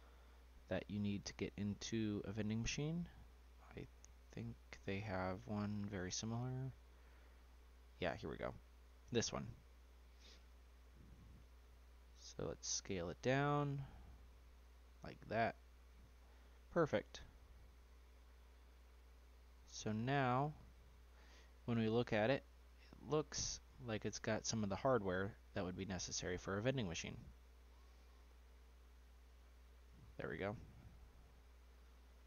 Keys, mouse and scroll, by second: 2.3 d, 9.9-10.3 scroll up 2, 10.3 click, 10.8 middle click, 11.3-12.0 scroll down 1, 12.0 click, 13.0 s, 16.0 click, 17.7 click, 19.2 click, 20.7-21.1 middle drag, 21.1-21.8 scroll down 3, 21.8-22.6 shift+middle drag, 22.6 click, 23.3-25.7 scroll down 2, 25.7 click, 26.5 s, 29.2 s, 30.3 click, 30.8-32.2 middle drag.